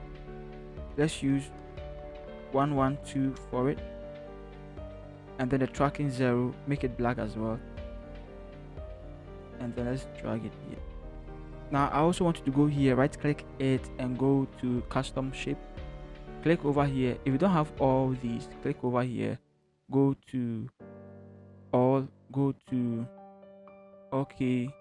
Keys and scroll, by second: 2.5-3.8 typing, 3.4 Return, 8.4 ctrl+t, 10.9 Right, 11.4 shift+Return.